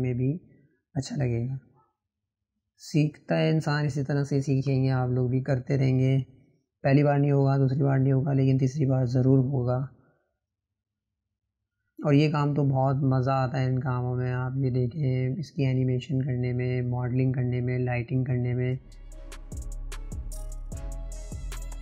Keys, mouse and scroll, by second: 2.2-3.8 drag, 4.3 click, 5.7-8.0 drag, 20.7 click, 21.2 scroll up 1.